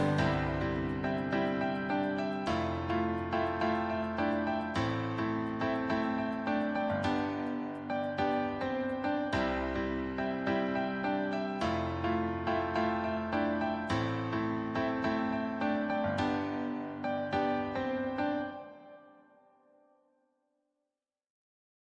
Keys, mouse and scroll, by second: 0.6 click, 3.0-7.5 drag.